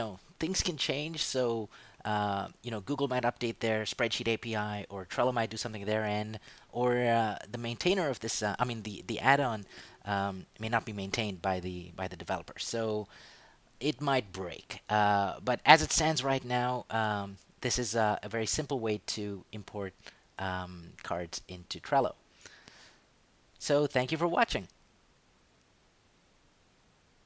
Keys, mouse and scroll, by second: 19.1 click, 23.0 click, 26.0 click.